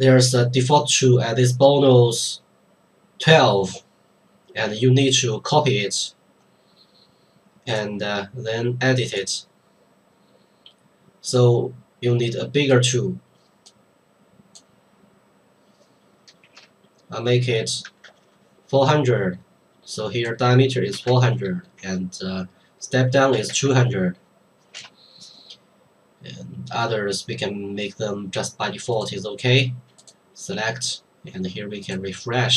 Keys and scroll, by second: 16.4 space, 17.8 KP_4, 18.1 KP_0, 21.0 KP_4, 21.0 KP_0, 21.2 KP_0, 23.3 KP_2, 23.5 KP_0, 23.6 KP_0, 24.7 BackSpace.